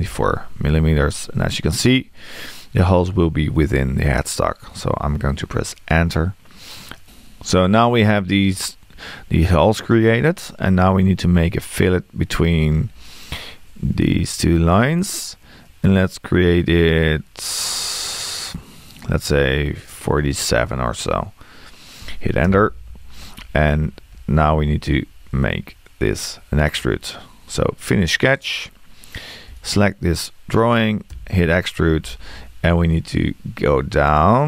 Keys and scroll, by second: 22.5 Return, 31.1 e.